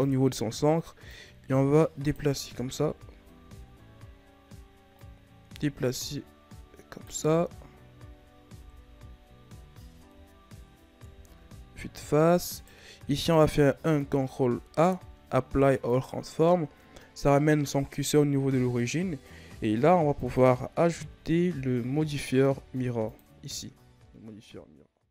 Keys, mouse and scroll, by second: 1.0-2.6 drag, 2.6 KP_1, 3.6-4.9 ctrl+scroll down 5, 4.9-7.1 drag, 7.1 a, 7.4-8.5 scroll down 3, 8.5 KP_3, 10.9 KP_1, 11.9-12.5 scroll up 4, 12.5 right click, 13.1 ctrl+a, 20.1-23.2 drag, 23.7 a, 24.0-24.7 scroll down 4.